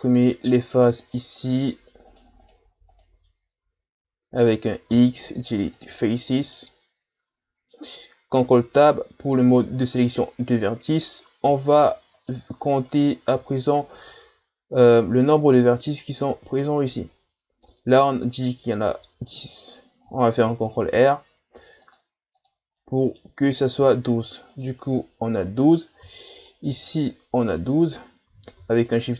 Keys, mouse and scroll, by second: 0.6 right click, 1.0 shift+right click, 1.4 shift+right click, 2.4 shift+right click, 2.9 shift+right click, 3.3-4.9 middle drag, 4.9 x, 6.6-8.4 middle drag, 8.4 ctrl+Tab, 12.2 alt+right click, 12.9 alt+right click, 20.5 ctrl+r, 22.8-24.5 middle drag, 24.5 alt+right click, 26.3 alt+right click, 28.9 alt+shift+right click.